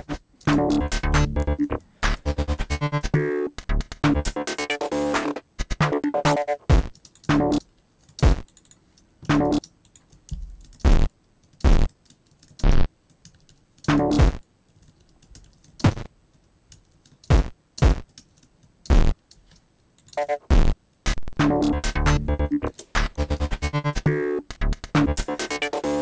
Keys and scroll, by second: 0.1 super+j, 0.2 alt+super+z, 0.3 alt+super+l, 0.7 alt+super+space, 2.0 alt+super+u, 6.9 space, 10.5 shift+Down, 12.1 alt+shift+space, 12.3 alt+shift+Down, 12.6 alt+shift+space, 13.3 alt+shift+Up, 13.8 shift+space, 15.0 alt+Up, 15.8 alt+shift+space, 16.9 alt+shift+Down, 17.3 alt+shift+space, 17.8 alt+space, 19.5 alt+space, 20.1 alt+space, 22.7 alt+super+l.